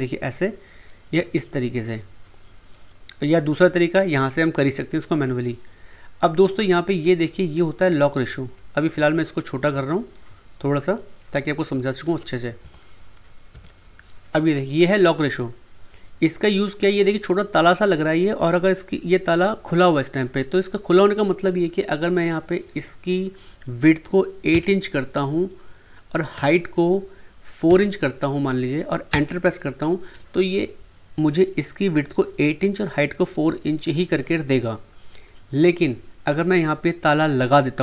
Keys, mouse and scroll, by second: 9.6 click, 10.9 click, 12.6-13.5 typing, 21.9 click, 26.3 Tab, 29.1 Return, 37.4 click.